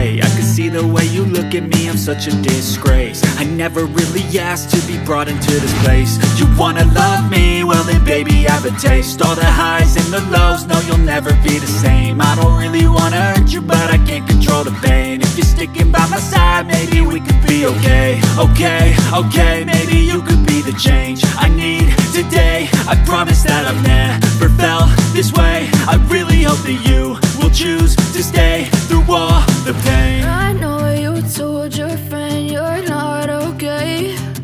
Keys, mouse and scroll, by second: 0.1 scroll down 1, 0.9-1.4 scroll down 1, 1.4-1.8 scroll down 1, 1.8-2.2 scroll up 1, 2.2 click, 4.1 click, 4.9 F4, 6.4 F9, 7.2 click, 8.7 double click, 9.3 ctrl+click, 10.2 double click, 10.5 click, 11.9 ctrl+click, 12.5 click, 12.7 double click, 14.0 click, 14.2 double click, 14.7 click, 15.6 click, 16.5 F9, 19.2 ctrl+o, 20.4 scroll down 1, 21.8-22.3 scroll up 1, 22.8 scroll up 1, 23.8-24.3 scroll down 1, 25.2 click, 26.3 click, 27.2 F4, 27.3 click, 28.7 ctrl+click, 29.5 click, 29.7 double click, 31.3 click, 31.8 scroll up 1, 32.2 ctrl+click, 33.6 scroll down 1, 33.8 click.